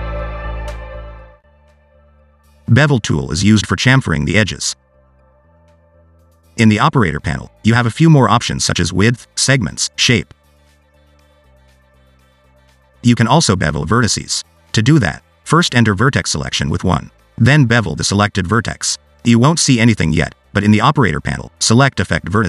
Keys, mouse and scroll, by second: 1.5 click, 2.9 click, 3.4 click, 4.1 click, 4.7 click, 7.2 click, 7.7 click, 8.8 click, 10.4 click, 12.9 ctrl+z, 14.2 1, 15.4 click, 16.9 middle click, 18.2 click, 19.9 click.